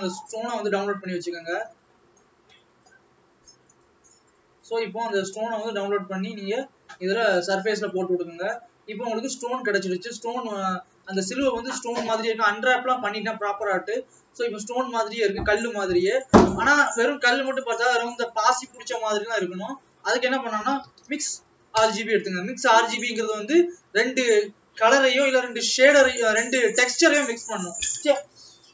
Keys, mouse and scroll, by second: 5.7 click.